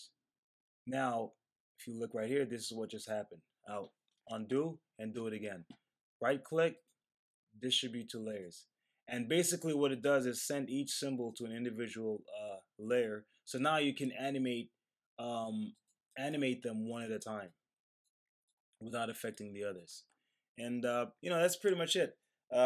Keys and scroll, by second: 4.2 super+z.